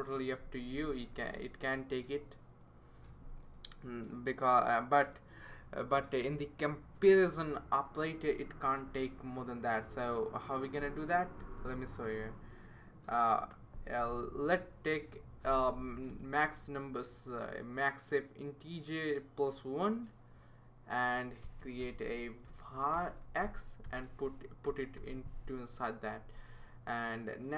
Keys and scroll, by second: 11.4 BackSpace, 11.6 BackSpace, 16.1 BackSpace, 21.2-26.6 typing.